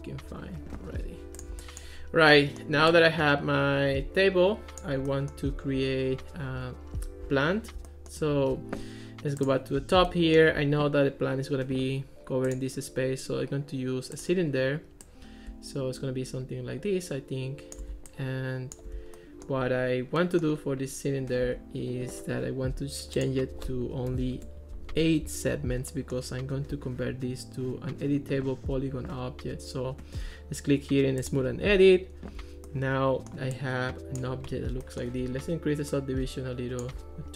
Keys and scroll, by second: 24.1 8, 24.4 Return.